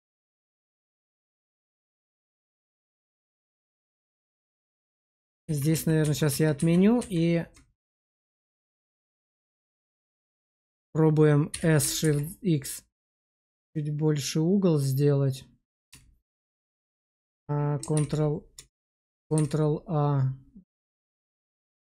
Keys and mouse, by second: 4.9 ctrl+z, 5.1 ctrl+z, 5.4 ctrl+z, 5.6 ctrl+z, 5.9 ctrl+z, 6.2 ctrl+z, 6.5 ctrl+z, 6.9 ctrl+z, 8.3 click, 8.8 Tab, 9.5 middle click, 11.4 s, 11.9 shift+x, 15.6 click, 17.8 ctrl+a, 18.5 Tab, 19.2 ctrl+a, 20.9 shift+middle click, 21.8 Tab.